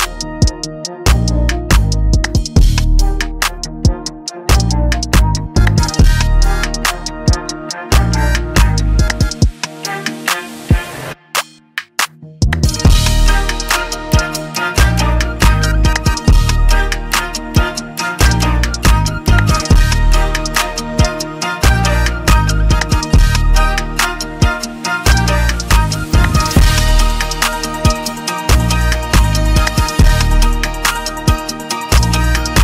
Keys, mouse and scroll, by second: 4.5 click, 6.5 click, 11.1 click, 11.9 right click, 11.9 z, 13.4 click, 13.4 right click, 14.3 click, 15.9 click, 16.0 Delete, 16.0 click, 18.1 click, 21.5 click, 22.6 click, 25.3 click, 27.9 click, 29.7 click, 32.3 scroll.